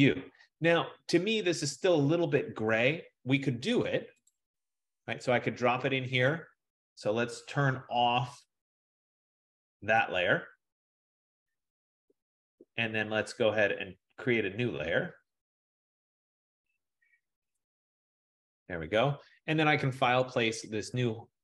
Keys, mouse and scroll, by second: 4.6-6.5 drag, 8.3 click, 9.9 click, 13.4-15.0 drag, 17.9 click, 20.3 click.